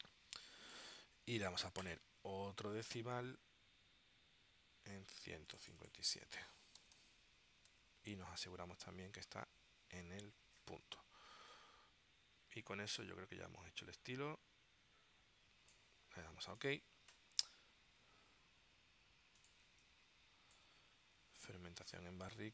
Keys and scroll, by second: 6.3-7.6 typing, 8.4 Tab, 19.8 space.